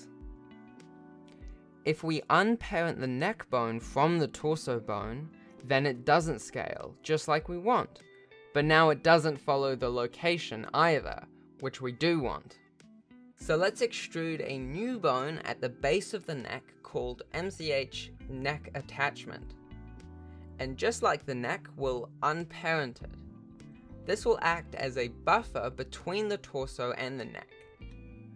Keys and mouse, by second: 0.0 Tab, 0.3 click, 1.8 alt+p, 3.9 r, 4.4 g, 6.3 g, 6.7 g, 8.6 g, 8.8 r, 9.0 g, 11.5 Tab, 13.2 e, 14.3 click, 15.1 alt+p, 21.9 ctrl+Tab, 23.5 Tab, 24.0 shift+click, 25.0 ctrl+p, 25.8 alt+a, 26.5 ctrl+Tab, 27.5 ctrl+Tab.